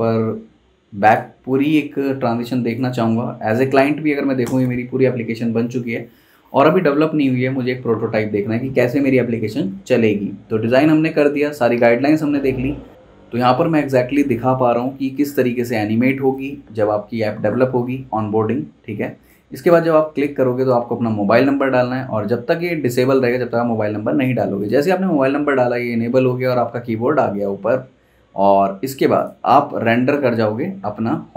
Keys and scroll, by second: 2.5 super+s, 4.4 super+Return.